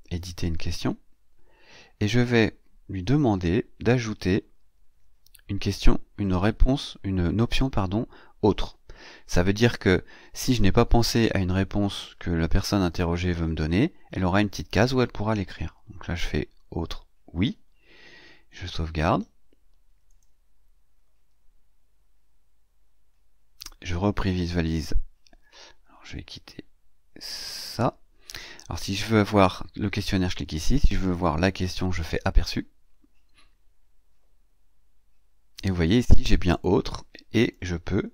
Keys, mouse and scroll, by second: 2.4-2.7 scroll down 2, 3.0 scroll up 2, 3.1-3.4 scroll down 2, 3.7 scroll down 2, 4.2-4.5 scroll down 2, 8.3 click, 18.4 scroll up 2, 19.0 scroll up 2, 19.9 click, 27.1 click, 32.2 click, 34.6-35.0 scroll down 2, 36.4 click, 37.3 click, 37.5-38.1 typing.